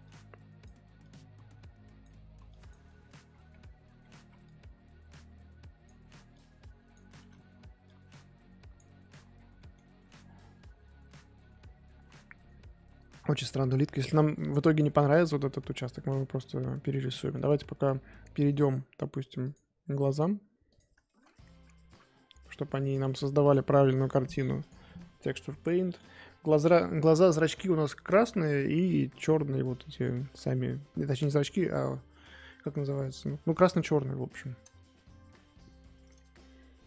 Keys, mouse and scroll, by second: 0.0-2.9 drag, 2.9-3.3 scroll down 1, 3.3-4.0 scroll up 9, 4.0 scroll down 4, 4.2 x, 4.4-7.3 drag, 7.3 ctrl+z, 7.8-9.1 drag, 9.1-9.6 scroll down 11, 9.6 middle click, 10.0-13.6 scroll up 3, 13.6 middle click, 13.8-14.5 scroll up 3, 14.5 middle click, 14.9-16.0 scroll up 2, 16.0 scroll up 1, 16.0-17.1 middle drag, 17.1 scroll down 4, 17.3 middle click, 17.5-18.5 scroll up 1, 18.5-20.2 shift+middle drag, 20.2-20.7 drag, 21.0-21.9 shift+middle drag, 21.9 KP_1, 24.7 click, 25.6-26.3 scroll up 2, 35.0 shift+middle click, 35.3-35.8 scroll up 3, 35.8-36.8 shift+middle drag.